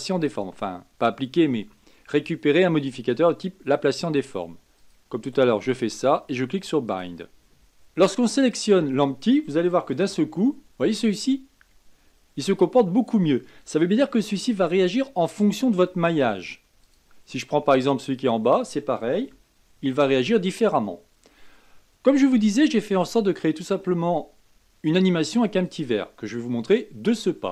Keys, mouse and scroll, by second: 4.7-7.5 drag, 8.5 click, 10.1 g, 18.1 click, 19.3 g.